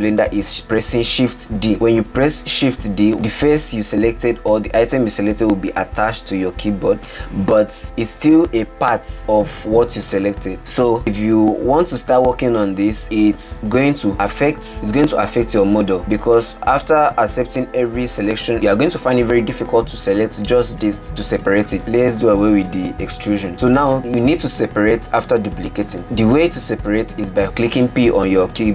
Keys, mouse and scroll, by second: 3.1 shift+d, 14.3 e, 23.6 ctrl+z.